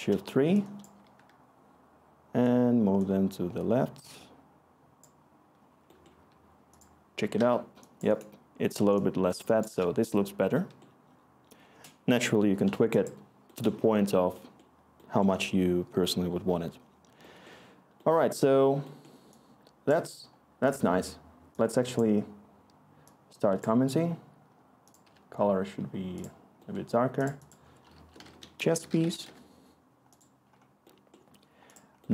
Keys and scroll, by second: 7.3 1, 25.0 c, 27.6-30.3 typing.